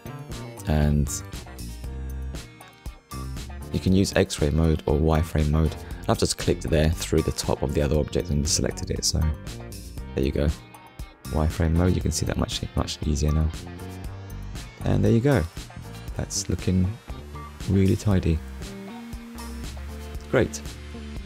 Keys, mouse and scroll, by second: 3.2 click, 4.5 middle click, 5.4 click, 6.0 middle click, 8.4 click, 9.2 middle click, 10.3 click, 10.8 middle click, 12.2 Delete, 12.7 Return, 13.9 click, 15.3 Tab, 15.8 click, 16.2 middle click, 18.3 scroll down 1, 19.3 KP_1, 20.3 scroll up 1.